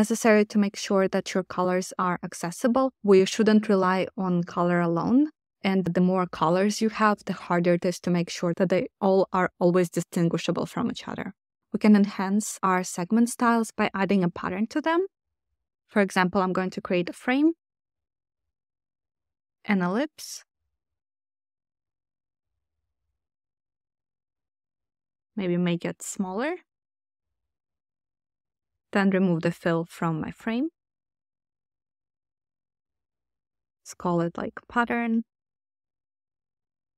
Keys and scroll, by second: 22.8 6, 23.7 0, 23.8 Return, 32.6-34.1 typing.